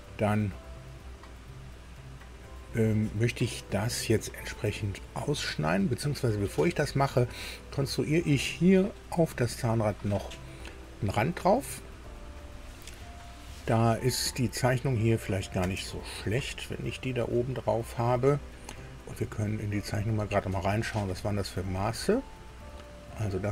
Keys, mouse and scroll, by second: 1.3 scroll down 2, 9.0-10.5 middle drag, 10.8 middle click, 15.1 click, 15.6 space, 19.6 click, 20.9-21.3 scroll up 2, 22.7-23.5 drag.